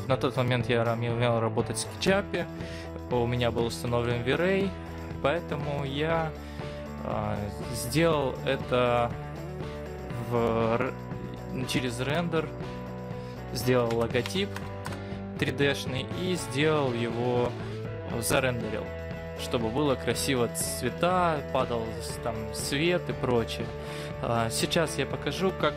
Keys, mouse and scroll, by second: 8.3 middle click, 9.3-11.1 scroll up 8, 12.2 Tab, 13.8 BackSpace, 14.3 BackSpace, 14.7 BackSpace, 14.9 BackSpace.